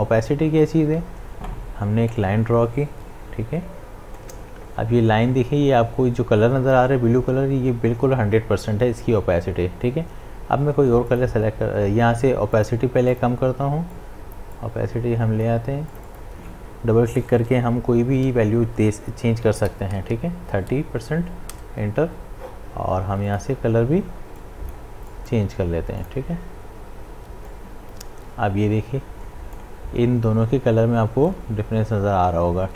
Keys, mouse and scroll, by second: 2.3 shift+Num_Lock, 2.3-6.9 drag, 14.2-15.9 drag, 23.3-31.9 drag.